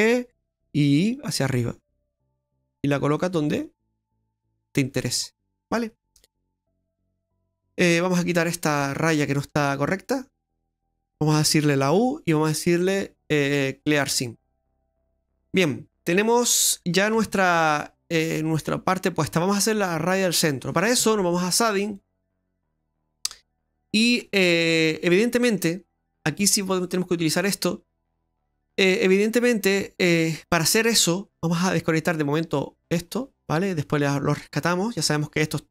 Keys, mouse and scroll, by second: 5.2-5.6 scroll up 1, 5.6 middle click, 7.3-8.3 scroll up 1, 8.3 right click, 8.8 alt+shift+right click, 9.1 right click, 10.6 alt+shift+right click, 11.8 u, 14.6-14.9 scroll down 2, 14.9 middle click, 15.3 right click, 17.2 a, 17.7 middle click, 19.4 middle click, 21.9 click, 22.5-23.6 scroll down 11, 23.5 middle click, 24.2 scroll up 1, 25.2 middle click, 27.4 middle click, 28.2 middle click, 30.1 click, 31.1 middle click, 32.5 click, 33.2 middle click, 34.1 click, 35.2 click.